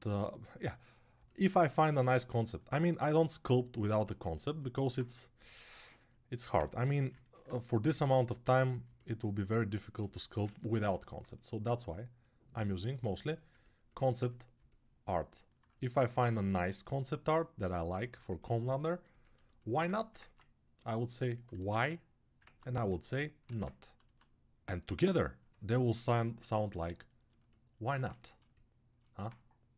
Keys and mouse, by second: 3.5-8.7 right drag, 6.6 g, 10.8-14.8 alt+right drag, 15.3 right click, 16.3 alt+q, 19.4-20.6 alt+right drag, 20.0 ctrl+Tab, 20.6-24.4 middle drag, 21.3 q, 23.2 ctrl+Tab, 23.8 q, 25.9 right click, 29.0-29.7 middle drag, 29.6 g.